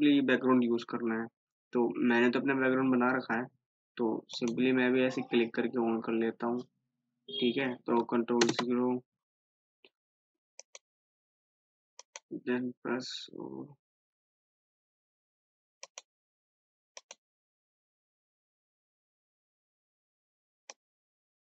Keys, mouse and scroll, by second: 4.5 click, 6.8 scroll up 1, 9.1 typing, 10.8 click, 16.0 click, 20.9 click.